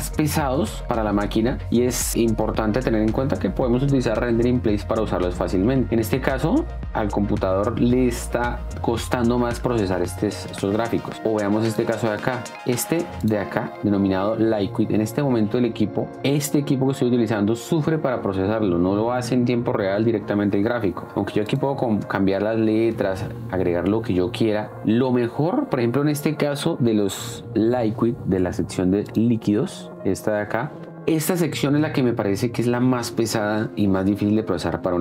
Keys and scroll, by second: 6.0 space, 10.8 space, 22.3-23.6 typing, 24.7 f, 24.8 BackSpace.